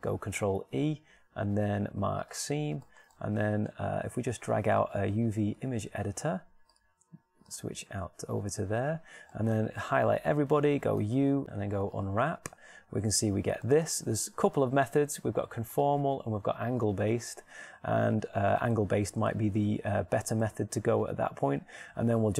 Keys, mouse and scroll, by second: 1.3 ctrl+e, 10.7 a, 11.7 a, 12.9 u, 15.9 t.